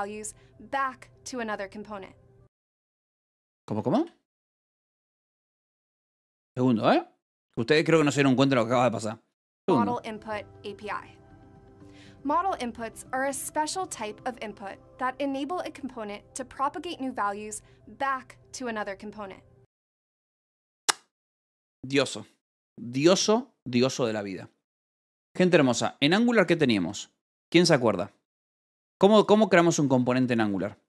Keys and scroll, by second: 27.2 Escape, 27.5 j, 29.8 k, 30.6 j.